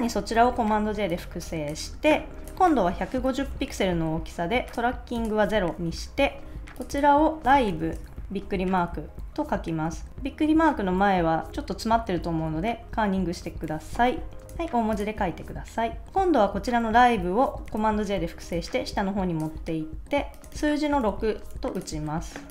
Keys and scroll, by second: 0.3 super+j, 2.9-3.9 typing, 5.7 0, 5.9 Return, 7.2-8.2 typing, 8.8 Left, 10.0 alt+Right, 10.7 alt+Right, 11.6 Right, 11.9 Left, 12.3 alt+Right, 13.3 Left, 17.7 super+j, 21.0 6.